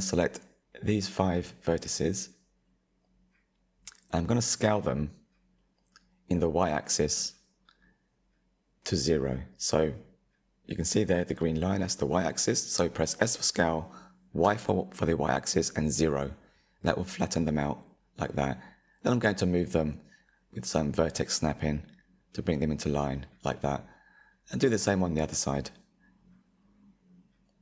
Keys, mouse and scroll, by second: 0.2 shift+click, 0.8 shift+click, 1.6 shift+click, 2.6 shift+click, 5.2 KP_3, 6.3 ctrl+KP_3, 7.3-10.3 scroll up 1, 12.4 s, 15.9 click, 19.6 click, 20.2 shift+click, 20.9 shift+click, 21.5 shift+click, 22.1 shift+click, 22.7 shift+click, 24.3 shift+click, 25.4 s.